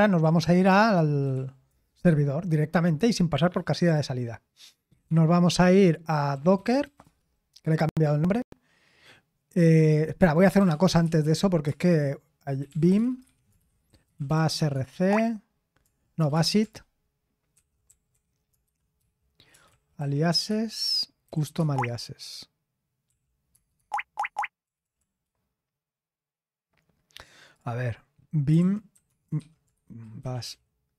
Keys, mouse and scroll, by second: 0.2-1.8 typing, 4.7-7.3 typing, 10.2-15.0 typing, 16.1 typing, 17.5-21.8 typing, 23.0 typing, 24.8 typing, 28.5-30.9 typing.